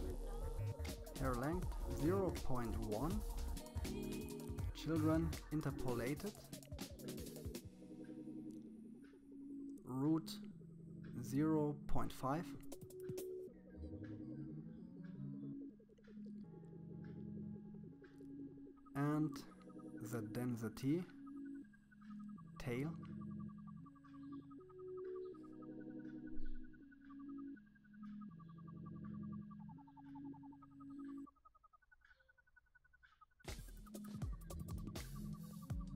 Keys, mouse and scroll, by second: 1.6-4.2 scroll down 13, 4.2-4.6 scroll down 1, 4.6 click, 5.3-6.3 scroll down 8, 7.5-9.0 drag, 12.0 click, 12.7-14.4 middle drag, 14.4-16.3 drag, 18.8-19.4 scroll down 3, 19.4-21.0 drag, 24.5-25.5 drag, 25.5-26.9 scroll down 21, 26.9-28.4 scroll down 8, 28.4-31.0 drag, 31.6-33.0 drag.